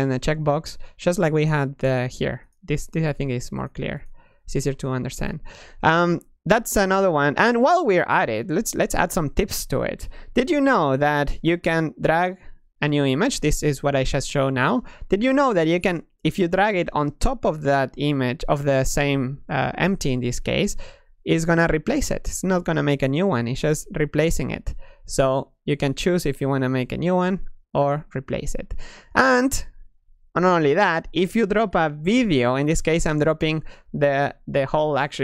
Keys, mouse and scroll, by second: 1.2 click, 2.3 click, 2.8 click, 3.5 click, 3.8 click, 5.0 click, 21.1-22.8 middle drag, 23.7-25.0 middle drag, 25.5-32.1 middle drag.